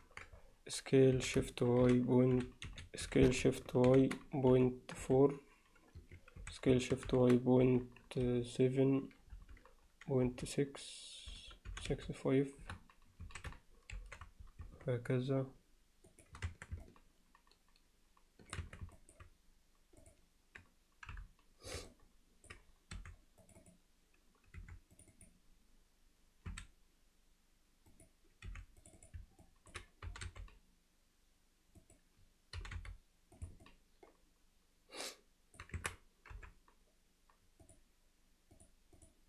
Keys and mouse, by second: 1.2 s, 3.1 s, 16.5 Tab, 16.9-18.6 middle drag, 18.6 Tab, 19.0 alt+middle click, 20.0 click, 21.1 KP_Divide, 21.9 alt+middle click, 23.0 3, 23.5 click, 24.6 2, 24.9 click, 26.5 s, 28.5 3, 28.9 click, 29.4 alt+middle click, 30.1 g, 32.6 g, 33.7-35.6 alt+middle drag, 35.8 Tab, 36.4 KP_Divide, 37.7 click, 38.6 click.